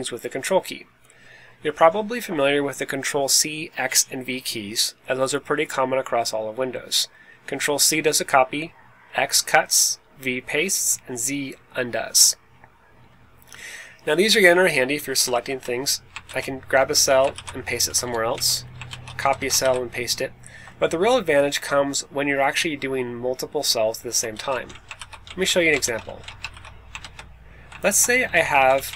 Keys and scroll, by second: 14.7 Right, 14.9 Right, 15.1 Right, 15.2 Up, 15.4 Up, 15.6 Up, 16.2 super+x, 16.7 Down, 16.8 Down, 17.0 Down, 17.3 super+v, 17.8 Up, 17.9 Up, 18.2 Right, 18.8 super+c, 19.1 Left, 19.3 Left, 19.5 super+v, 21.0 Escape, 24.3 super+x, 24.5 Up, 24.6 Right, 24.9 super+v, 25.2 Right, 25.5 Down, 25.7 super+x, 26.0 Up, 26.5 super+v, 26.9 super+Left, 27.8 super+Left, 28.4 Left, 28.5 Left, 28.7 Right, 28.8 Right.